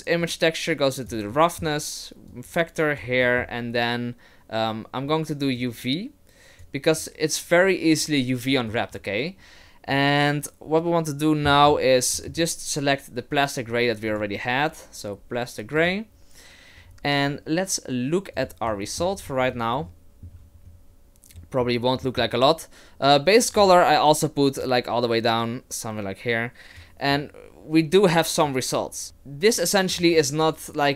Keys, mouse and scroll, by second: 0.2 click, 1.3 middle click, 2.3 click, 3.2 middle click, 5.6 click, 8.7 right click, 12.2 middle click, 12.3-14.1 scroll up 1, 14.1 click, 18.5 click, 18.8 shift+middle click, 19.4-19.7 scroll up 7, 20.1 shift+middle click, 20.5-21.1 scroll down 2, 21.4 middle click, 22.0 middle click, 24.6 click, 29.0 middle click, 29.0-29.9 scroll down 2, 29.9 right click.